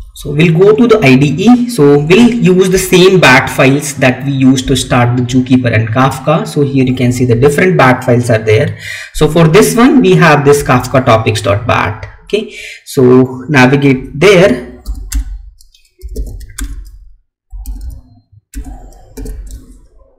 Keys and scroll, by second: 19.1 Tab.